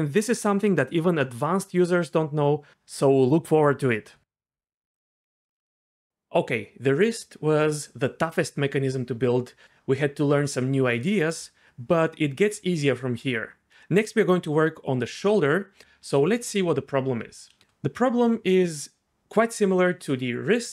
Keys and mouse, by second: 5.2 Tab, 5.5 a, 5.6 alt+r.